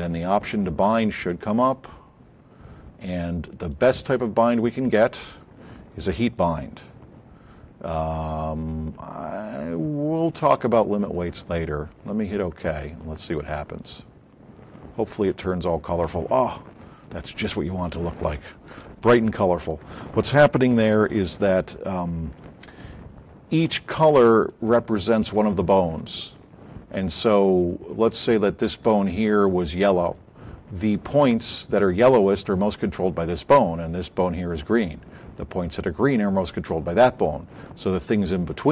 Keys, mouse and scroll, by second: 1.6 click, 3.0-3.7 drag, 4.6 click, 6.4 click, 13.5 click, 20.6 a, 21.8 scroll up 4, 22.6-24.4 drag, 25.5 alt+click.